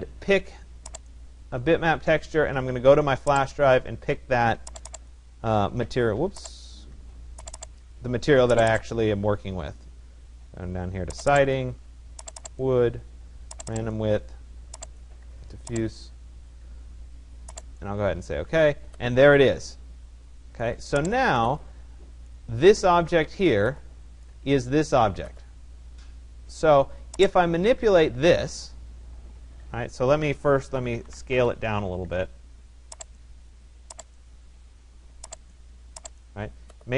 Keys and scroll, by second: 30.8 Return.